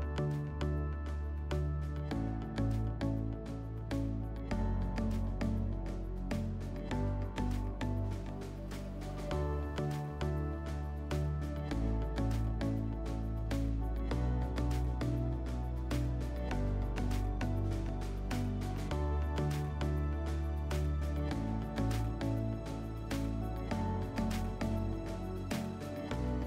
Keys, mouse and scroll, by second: 8.5 click, 10.6 click, 14.6 click, 16.2 click, 18.6 click.